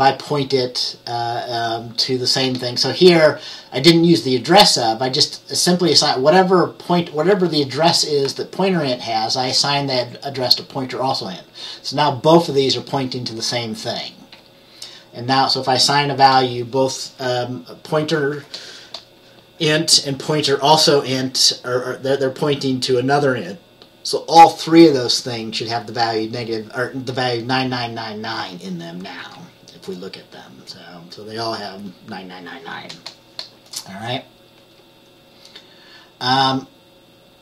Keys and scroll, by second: 14.4 F10, 29.3 F10.